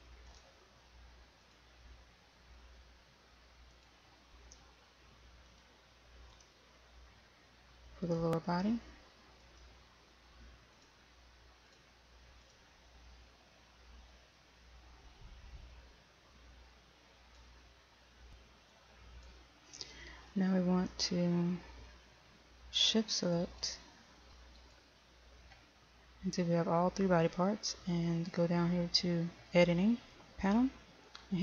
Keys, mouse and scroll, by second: 24.2 shift+right click, 25.3 shift+right click.